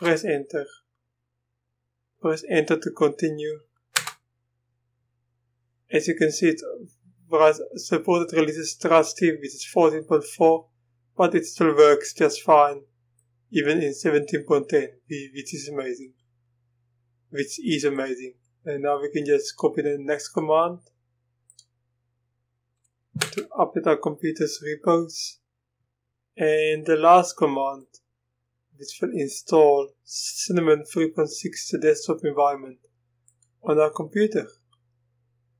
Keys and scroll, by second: 4.0 Return, 23.2 Return.